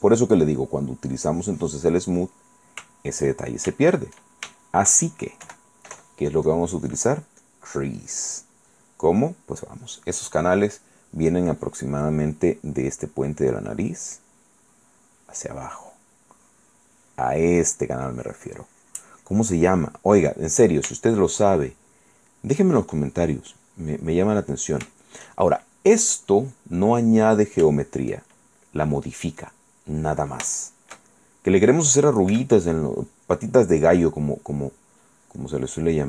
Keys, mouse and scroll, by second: 0.6 middle click, 1.3 click, 2.2 click, 2.7 middle click, 2.7 shift+click, 3.1 shift+middle click, 3.2 shift+click, 3.8 shift+middle click, 4.8 shift+middle click, 5.6 KP_1, 6.7 click, 7.6 click, 9.1 middle click, 12.4 middle click, 13.6-16.1 drag, 16.5-18.2 drag, 18.3-19.7 drag, 20.0 middle click, 21.1 shift+click, 21.7 shift+click, 22.5 click, 23.3-24.3 drag, 24.7 click, 26.4 click, 27.3 click, 28.0 shift+click, 28.5 shift+click, 29.7 click, 30.8-31.9 shift+drag, 32.5 f, 33.3 click, 35.2 click.